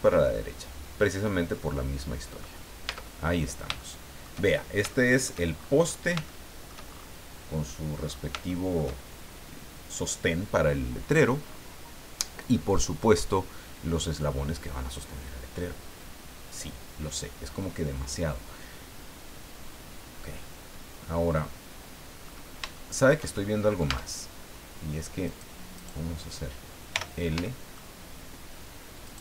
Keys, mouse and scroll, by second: 0.0-2.2 drag, 2.8 Tab, 3.3-3.6 scroll down 2, 3.8 shift+middle click, 4.9 shift+middle click, 5.6-6.1 shift+scroll up 4, 6.2 shift+middle click, 8.1 scroll down 3, 8.5 shift+middle click, 11.0-11.3 scroll down 1, 11.4-11.7 scroll up 1, 22.2-22.6 scroll up 1, 22.7 shift+middle click, 23.4 shift+scroll up 1, 23.8 Tab, 25.2 right click, 25.7 right click, 26.9 l, 27.4 shift+middle click, 29.0 shift+right click.